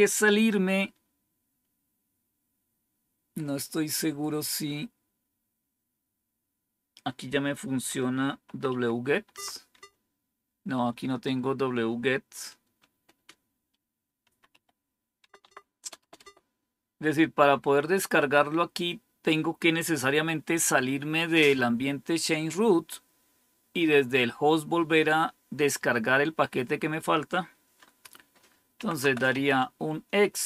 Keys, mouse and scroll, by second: 8.1-9.1 typing, 9.2 Tab, 9.6 Tab, 12.8 BackSpace, 13.0 BackSpace, 14.1-14.4 typing, 15.1 Tab, 15.3 Tab, 15.7 BackSpace, 16.1 BackSpace, 28.4-29.7 typing.